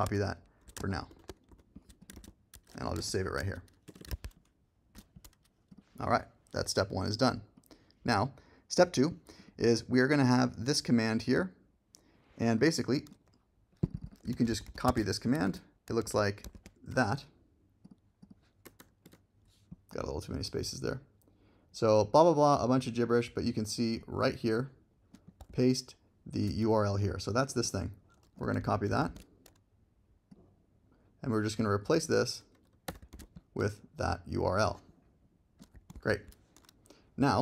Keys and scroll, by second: 1.1 shift+super+n, 2.9 alt+z, 3.9 Return, 4.1 super+Tab, 14.3 super+c, 14.9 super+Tab, 15.4 super+v, 16.0 alt+z, 18.6 BackSpace, 28.6 super+c, 32.8 BackSpace, 33.1 super+v, 35.9 super+c.